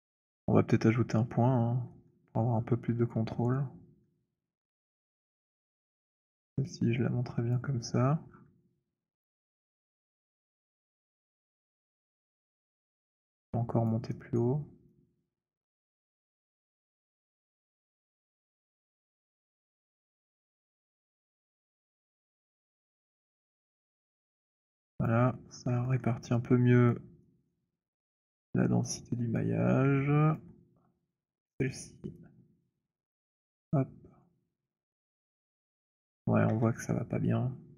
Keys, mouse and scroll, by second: 1.1-2.5 scroll, 2.5 scroll, 3.0 alt+scroll, 4.0-6.7 alt+scroll, 7.4 click, 7.6-9.1 scroll, 13.0 alt+click, 13.0 alt+middle click, 13.6 alt+click, 14.3 alt+right click, 15.0-15.4 alt+scroll, 15.8 alt+click, 19.0 click, 19.6-21.4 scroll, 22.7-23.7 scroll, 23.7 click, 24.1-25.1 scroll, 25.1 alt+click, 25.5 scroll, 26.0 alt+middle click, 26.9 alt+click, 27.4 alt+middle click, 28.4 alt+click, 30.5 alt+click, 31.2 click, 34.0 click, 34.7 middle click, 36.4 middle click, 36.4 alt+click, 36.4 z.